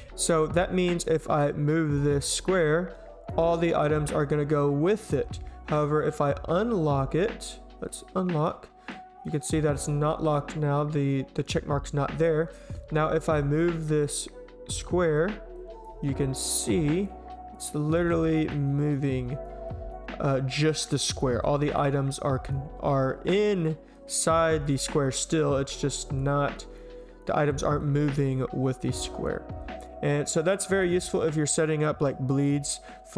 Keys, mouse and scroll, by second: 1.1 click, 1.9 click, 2.9-3.3 drag, 3.8-4.2 drag, 4.5-4.9 drag, 7.8 click, 8.4 click, 9.2 right click, 12.3 click, 14.7-15.1 drag, 15.6 drag, 16.3 click, 16.8 drag, 17.3 click, 17.8 drag, 18.3 click, 18.6-19.0 drag, 19.3 click, 19.7 click, 20.2 drag, 20.8 drag, 21.4 click, 22.3 click, 23.4 click, 23.9 click, 27.6 click, 28.1 click.